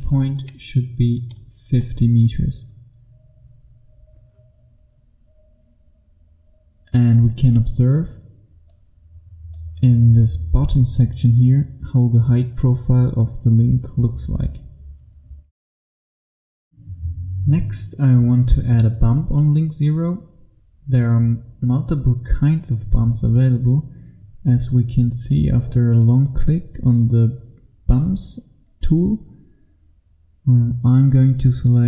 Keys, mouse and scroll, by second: 1.7 KP_5, 8.8 click, 17.1 F1, 25.4 click.